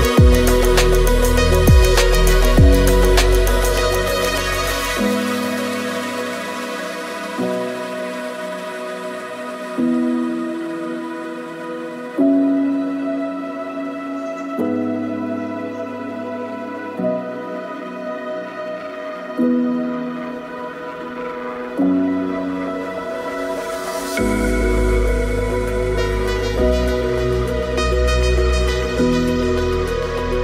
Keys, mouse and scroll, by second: 0.4 shift+middle click, 4.6 shift+middle click, 4.6 KP_0, 4.8 shift+click, 5.0 click, 6.3 shift+d, 6.9 middle click, 7.2 shift+s, 7.7 middle click, 8.3 click, 8.8 click, 9.3 click, 10.4 shift+s, 11.5 shift+s, 11.9 g, 12.3 click, 12.6 alt+d, 13.7 shift+s, 13.9 KP_Decimal, 14.0 click, 14.2 middle click, 14.8 ctrl+click, 15.4 alt+d, 15.9 KP_2, 17.5 g, 17.9 shift+click, 18.2 click, 18.4 shift+s, 18.7 KP_Decimal, 19.4 click, 20.1 shift+click, 20.7 shift+s, 21.0 click, 21.1 r, 21.4 click, 23.8 click, 24.3 middle click, 24.5 click, 25.5 shift+s, 25.7 click, 26.0 middle click, 26.1 shift+s, 26.4 shift+click, 26.7 alt+d, 27.2 shift+s, 27.5 middle click, 27.9 click, 28.0 alt+d, 28.2 shift+click, 28.7 shift+s, 29.0 middle click.